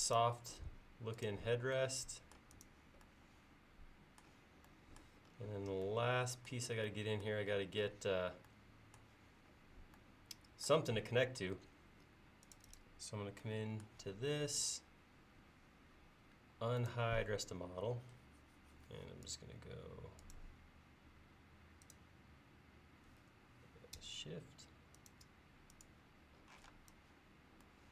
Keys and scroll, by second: 18.1 l, 26.6 p.